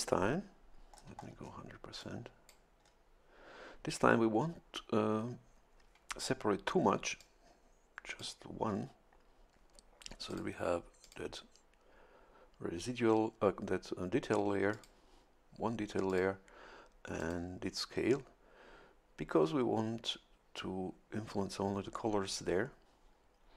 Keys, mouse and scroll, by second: 0.9-1.7 scroll up 2, 2.0 click, 2.8 scroll up 2, 7.2-8.4 drag, 10.3 click, 11.0 click, 14.7 click, 16.1 click, 17.2 click.